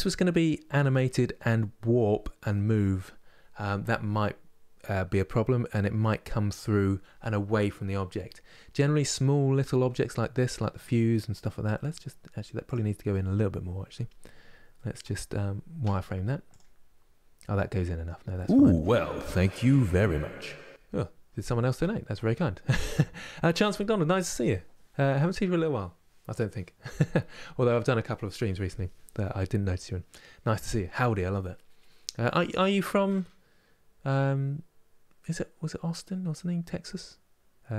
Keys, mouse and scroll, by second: 8.5-10.9 middle drag, 10.9 scroll up 3, 11.4 middle click, 12.4 click, 14.4-16.2 middle drag, 16.2 z, 16.6-17.3 scroll up 4, 17.3 middle click, 18.0-37.7 scroll down 10.